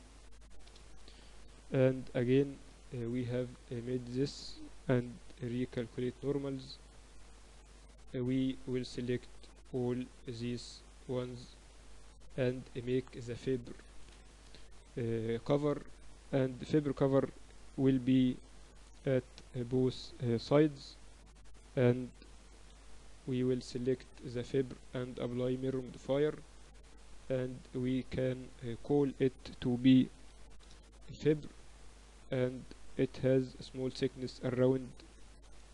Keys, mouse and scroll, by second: 2.5-3.5 typing, 4.9 a, 5.1 a, 5.9 ctrl+n, 6.4 Tab, 7.2 Tab, 9.0 click, 9.9 middle click, 10.7 click, 10.7-16.2 right drag, 15.3 KP_1, 16.2-18.1 middle drag, 19.5 shift+d, 21.6 p, 22.4 Tab, 23.2 KP_8, 23.4 KP_8, 23.7 KP_6, 24.1 z, 24.7 middle click, 26.5 click, 27.0 click, 27.1 Tab, 27.5 click, 27.5 a, 27.8 a, 28.2 a, 29.4-31.8 drag, 32.7 z, 34.0 KP_1.